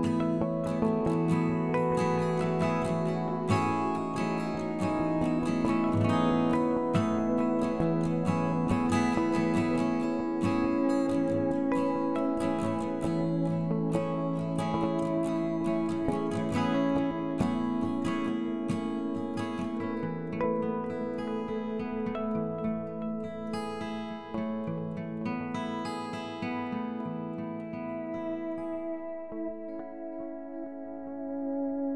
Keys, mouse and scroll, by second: 0.6 s, 1.7 s, 3.5 g, 5.2 s, 6.3 s, 7.1 KP_1, 7.4 scroll up 2, 8.4 g, 9.7 shift+click, 10.4 g, 11.5 click, 11.7-13.1 middle drag, 13.1 scroll up 2, 13.4-13.7 scroll down 1, 13.7 click, 14.3 KP_1, 15.1 click, 15.9 g, 17.6 click, 18.4 g, 19.6 middle click, 20.1-21.1 drag, 21.1 Tab, 21.7 e, 22.9 Tab, 23.3 KP_7, 23.6-24.1 scroll down 4, 24.1 scroll up 1, 24.9 g, 27.0-27.3 scroll down 1, 27.3 shift+middle click, 28.1 s, 31.2-31.9 drag.